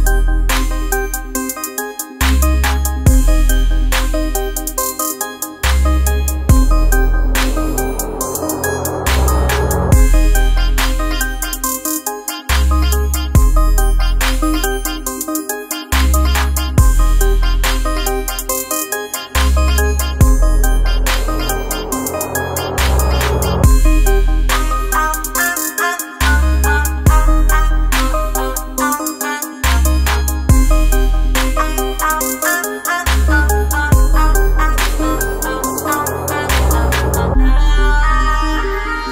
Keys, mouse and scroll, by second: 5.2 click, 7.6 click, 9.8 click, 12.7-23.9 drag, 23.5 typing, 23.9-31.1 drag, 31.1 ctrl+t, 32.8-37.8 drag, 37.8-39.1 drag.